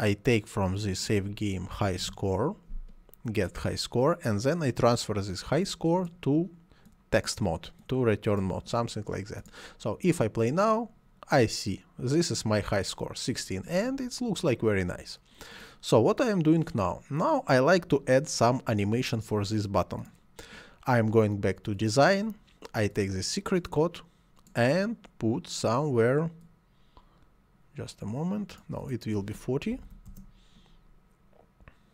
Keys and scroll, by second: 1.6-2.5 typing, 29.8 4, 30.1 0, 30.1 Return.